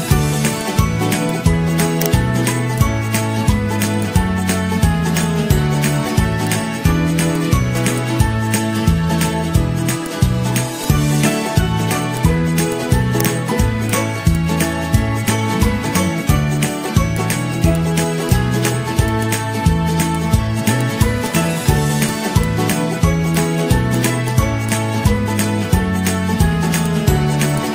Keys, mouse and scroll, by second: 7.6-8.2 z, 8.3-8.7 g, 8.7 ctrl+-, 19.5 ctrl+-, 19.6 ctrl+-, 19.6 ctrl+-, 20.3 ctrl+a, 21.7 z, 22.8 ctrl+-, 25.9 ctrl+g.